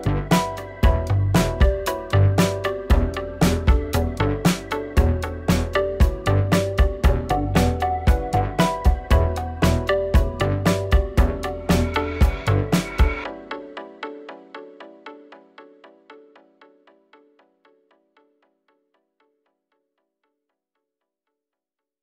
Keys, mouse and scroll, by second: 0.8 k, 3.5 k, 5.7-6.2 scroll down 2, 6.2 shift+middle click, 6.4-6.8 scroll up 2, 6.8 k, 9.5 click, 9.7 g, 11.0 k, 14.0 k, 18.6 k, 20.9 k.